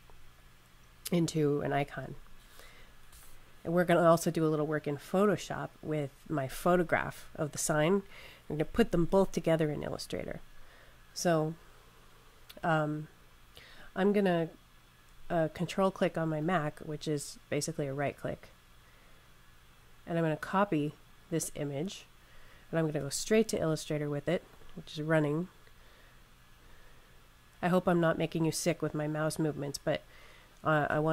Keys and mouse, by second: 16.2 ctrl+click, 24.4 click.